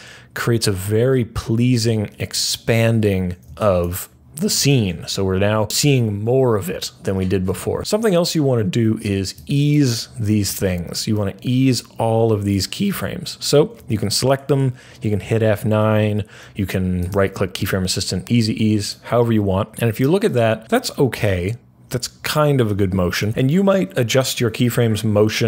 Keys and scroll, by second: 14.3 F9.